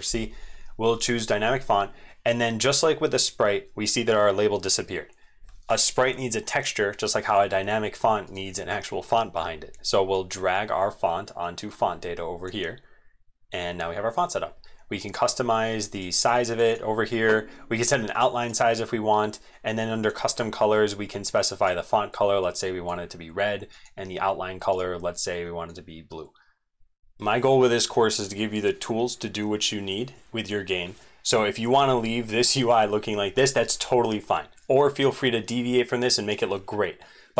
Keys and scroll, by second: 27.0 ctrl+z.